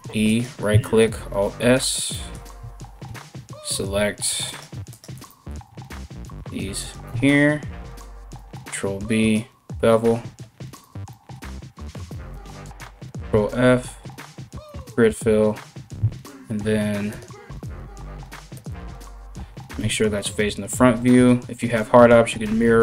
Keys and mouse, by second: 0.5 alt+s, 3.3 2, 4.0 alt+right click, 4.2 alt+shift+middle click, 4.5 alt+shift+right click, 4.6-5.8 alt+shift+middle drag, 5.8 alt+shift+right click, 5.9 alt+shift+middle click, 6.4 alt+shift+right click, 6.5-22.8 alt+shift+middle drag, 11.9 alt+right click, 16.7-22.8 drag, 19.3 KP_1, 21.7 alt+x.